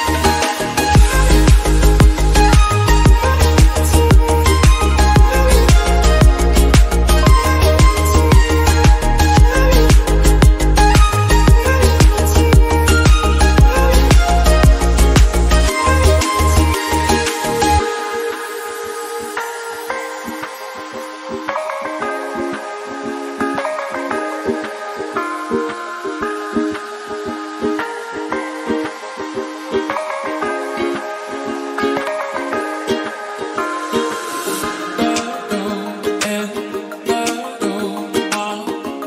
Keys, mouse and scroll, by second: 0.1-0.9 middle drag, 0.9 scroll down 2, 1.2-1.9 middle drag, 1.9 click, 2.4 KP_Decimal, 2.7 KP_0, 3.7 g, 4.4 scroll down 1, 4.6-5.4 shift+middle drag, 5.4 scroll up 2, 5.6-6.7 shift+middle drag, 6.7 s, 7.2-7.7 scroll down 6, 7.7 drag, 8.0-8.8 scroll down 4, 8.8 KP_0, 9.2 KP_0, 9.6-11.8 shift+middle drag, 11.8 shift+a, 12.7 Delete, 14.3 shift+a, 14.9 t, 15.6 s, 16.5-20.8 drag, 20.8 r, 22.0 click, 22.3 scroll down 2, 22.5-24.7 middle drag, 24.8 ctrl+z, 25.7 ctrl+z, 26.1 r, 27.3 click, 28.2 click, 28.6-29.0 scroll down 2, 29.0-29.4 scroll up 2, 29.5 s, 31.0-32.1 middle drag, 32.1 click, 33.6-39.0 drag.